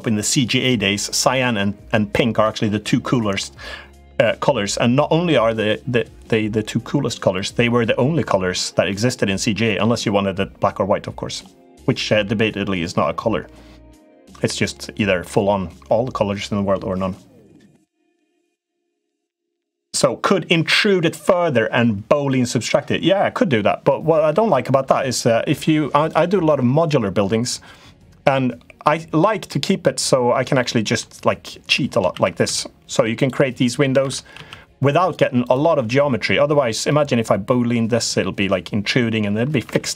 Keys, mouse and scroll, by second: 8.7 middle click, 25.8 click, 28.2 middle click, 30.4 middle click, 31.2 middle click, 31.9 shift+d, 33.8 shift+d, 35.2 click, 36.6 middle click, 39.5 ctrl+z, 39.6 ctrl+z.